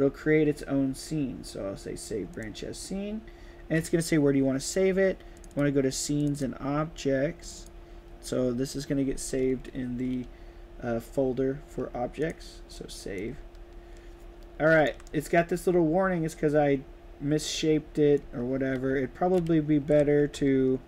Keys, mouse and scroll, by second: 2.3 click, 5.3 click, 6.1 click, 6.3 click, 7.4 click, 7.5 click, 12.1 click, 13.1-14.9 right drag, 13.3 d, 14.7 w, 18.2 right click, 18.2-20.8 typing.